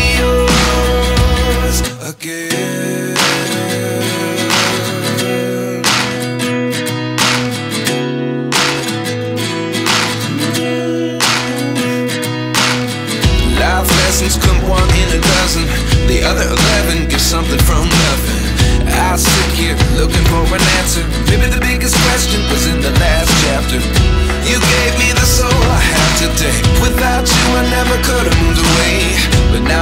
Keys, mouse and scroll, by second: 1.4 g, 5.3-6.3 scroll up 1, 7.3-7.9 drag, 9.2-9.8 scroll down 1, 9.8 ctrl+s, 10.5 KP_0, 11.5-12.5 scroll up 5, 12.5 ctrl+s, 13.1-14.9 typing, 15.9 click, 16.1 shift+d, 16.4 g, 17.5 s, 18.6-21.7 typing, 19.7 scroll down 1, 21.0 click, 22.6 scroll up 3, 22.7 scroll down 3, 22.8 shift+middle click, 23.0 shift+middle click, 23.2 scroll up 1, 23.4 s, 24.0 g, 24.3 scroll down 3, 24.5 ctrl+s, 24.5 Left, 25.1 s, 25.5 g, 25.9 g, 26.6 Left, 27.5 click, 28.4 g, 29.0 g, 29.2 scroll down 1, 29.3 ctrl+s, 29.4-29.8 shift+middle drag.